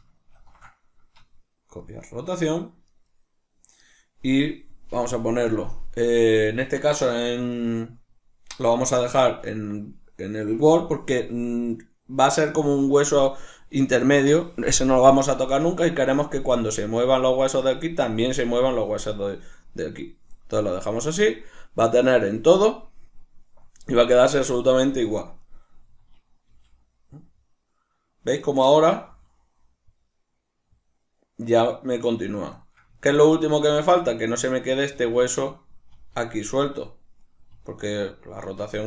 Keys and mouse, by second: 0.4 ctrl+shift+c, 2.9 right click, 3.1 right click, 9.1-25.5 drag, 25.5 right click, 26.5 g, 28.5 right click, 28.7-32.3 ctrl+middle drag, 29.1 g, 32.3 right click, 32.6-34.2 shift+middle drag, 33.7 g, 34.2 right click, 34.8 right click, 35.0 g, 35.5 right click, 36.0 r, 37.4 right click, 37.5 r, 38.6 right click.